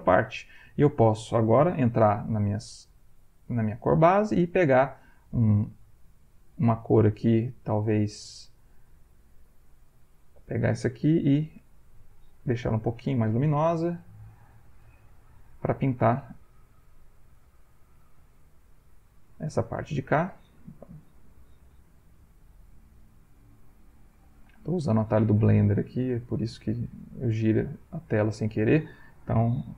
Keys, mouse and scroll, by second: 1.5 click, 2.5 b, 6.0 ctrl+middle click, 7.9 ctrl+click, 10.2 ctrl+click, 11.5 l, 12.9 shift+click, 13.8-15.1 shift+drag, 15.5 click, 16.5 click, 17.3 shift+click, 18.3 shift+click, 19.6 shift+middle click, 20.1 shift+click, 21.5 ctrl+alt+v, 22.1 ctrl+middle click, 22.7 ctrl+middle click, 23.6 click, 24.0-25.4 drag, 26.0 click, 26.9-29.0 ctrl+middle drag, 29.6 ctrl+alt+v.